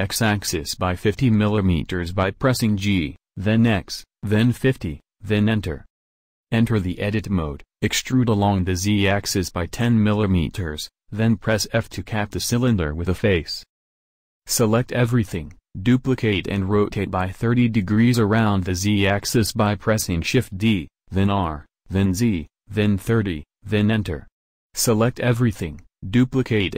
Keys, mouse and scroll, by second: 6.1 Tab, 6.8 e, 9.5 f, 14.5 a, 14.7 a, 15.3 shift+d, 24.8 a, 24.9 a, 25.5 shift+d.